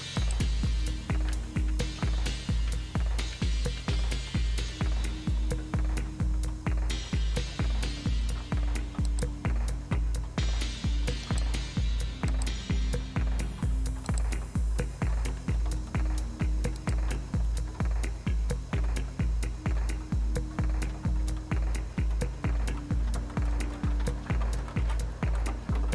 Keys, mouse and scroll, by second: 0.2-1.3 drag, 1.3-3.8 typing, 9.1 click, 11.3 click, 12.3 click, 14.1 click, 16.8 click.